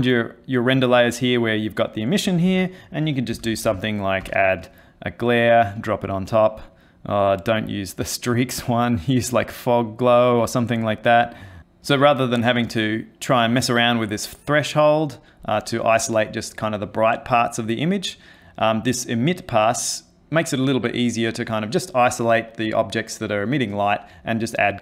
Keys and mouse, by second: 2.5 ctrl+shift+a, 7.5 click.